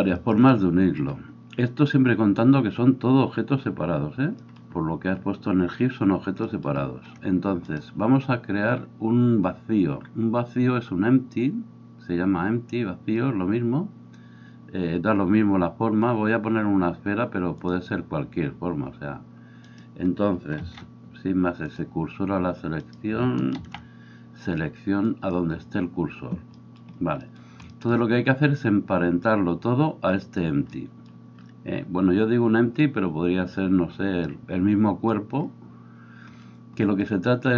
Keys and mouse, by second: 20.6 shift+s, 23.6 shift+s.